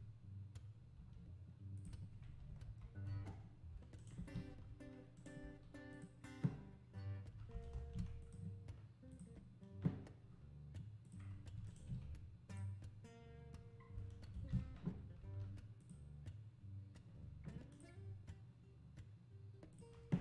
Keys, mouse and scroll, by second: 0.9 g, 2.6 KP_Decimal, 3.2 scroll down 3, 4.0 shift+right click, 4.2 shift+s, 4.7 g, 9.1-11.7 drag, 11.7 shift+right click, 12.5-14.3 drag, 14.3 shift+s, 15.2 g, 17.7-20.2 drag.